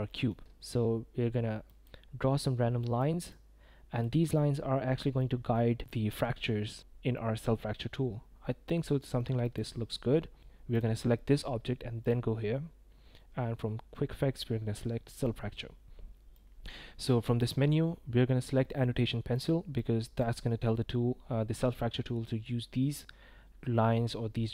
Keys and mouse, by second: 0.1 click, 1.7 click, 2.8 click, 3.3 click, 4.3 click, 5.2 click, 5.8 click, 7.2-9.2 middle drag, 9.4 click, 10.7 click, 12.0-24.5 drag.